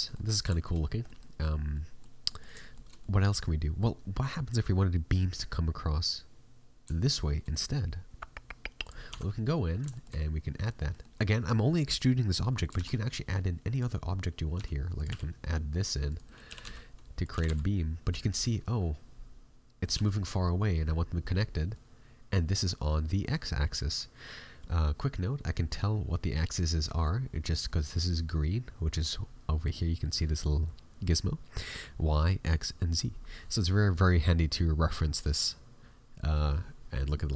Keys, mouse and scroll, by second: 0.0 middle click, 0.5 shift+middle click, 0.7 scroll up 5, 1.0 middle click, 1.7 middle click, 2.6 shift+middle click, 2.9 middle click, 6.9 shift+middle click, 7.3 middle click, 8.8 right click, 9.0 Tab, 9.4 middle click, 9.6 scroll up 2, 9.9 middle click, 10.1 middle click, 12.5 middle click, 12.7 shift+a, 13.9-14.4 scroll down 4, 14.2-14.7 scroll up 2, 14.5 s, 15.0 g, 16.2 middle click, 16.4 g, 17.3 g, 18.3 middle click, 19.9 g, 26.8 middle click, 27.2-29.6 scroll down 2, 29.6 click, 29.7 middle click.